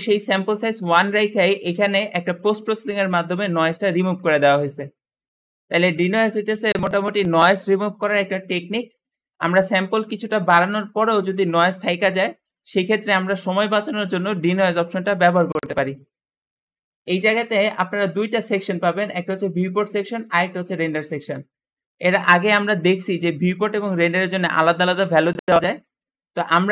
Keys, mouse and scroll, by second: 17.6-24.7 drag.